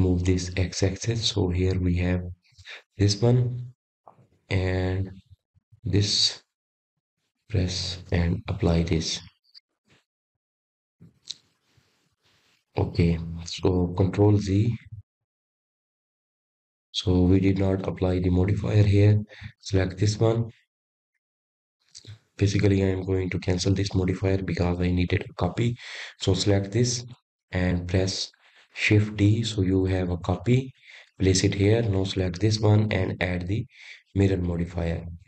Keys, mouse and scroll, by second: 1.9 click, 4.1 click, 6.0-6.6 scroll up 2, 6.6-7.1 scroll up 1, 8.2 click, 10.8-12.8 drag, 12.8-14.1 scroll down 3, 14.1-15.0 scroll up 1, 15.0 click, 15.4 click, 15.9 click, 16.4 click, 18.1 ctrl+z, 18.7 ctrl+z, 19.1 ctrl+z, 19.6 ctrl+z, 20.0 ctrl+z, 21.7 click, 22.9 click, 24.3 click, 27.5-28.6 drag, 32.9 shift+d.